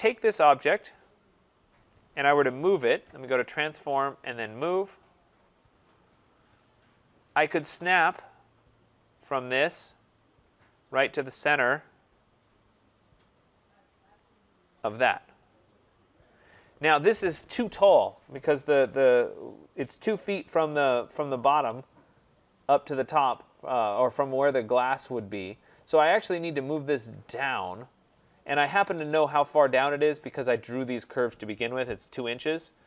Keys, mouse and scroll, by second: 1.2 click, 3.5 scroll, 3.9 click, 4.5 click, 6.3 click, 7.0-7.4 scroll, 8.0 scroll, 9.9 click, 10.2 scroll, 11.1-11.8 scroll, 14.2 click, 16.0-16.4 scroll, 17.0 scroll, 21.0-22.2 scroll down 8, 28.0-29.1 scroll up 1, 29.1 scroll down 1, 29.2 scroll down 1.